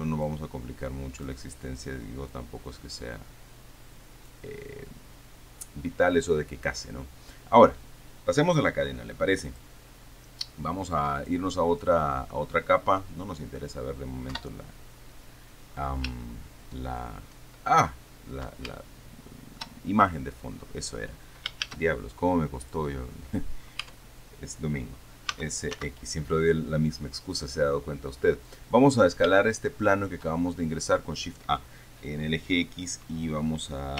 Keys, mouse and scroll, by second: 0.5-1.7 drag, 2.6-4.8 drag, 4.9-6.2 scroll down 1, 6.2-7.0 scroll up 1, 9.8 click, 11.5 click, 12.3 click, 13.3 click, 14.6 KP_7, 16.5 shift+click, 19.0-20.0 shift+middle drag, 21.9 shift+a, 22.9 click, 24.1 Tab, 25.6 s, 26.1 x, 28.9 click, 29.2-29.7 scroll up 1, 29.7 shift+click.